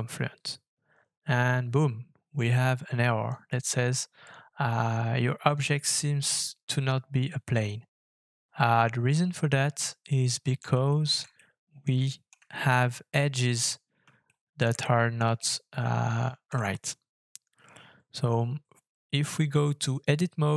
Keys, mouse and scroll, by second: 10.1 middle click, 10.9 shift+middle click, 11.3 middle click, 12.0 shift+middle click, 12.3 shift+scroll up 2, 13.1 scroll up 1, 14.2 shift+middle click, 14.8 middle click, 15.3 shift+middle click.